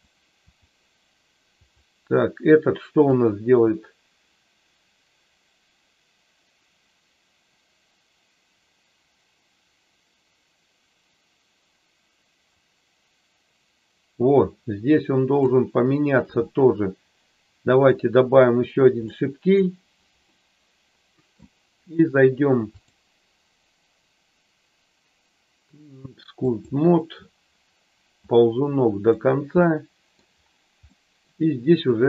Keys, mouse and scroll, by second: 1.6 click, 3.1-15.4 drag, 17.7 click, 19.1 middle click, 20.2-21.3 middle drag, 22.7-26.7 drag, 28.3 click, 29.6 middle click, 30.8 middle click, 31.8 click.